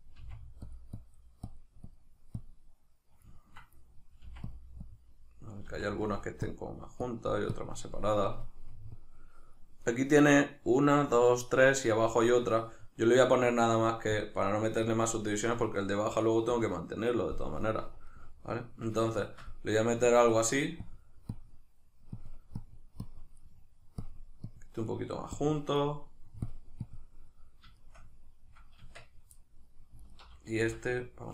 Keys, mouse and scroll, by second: 0.2 f, 3.4-4.5 ctrl+middle drag, 4.3 f, 4.5 click, 5.7 click, 5.7 f, 13.0-18.1 drag, 18.1-20.8 middle drag, 20.8-23.4 drag, 23.4 middle click, 24.1 click, 24.9 middle click, 25.4 click, 25.9 middle click, 26.5 click, 27.3-30.0 middle drag, 28.8 Tab, 30.0 alt+right click, 30.6 s.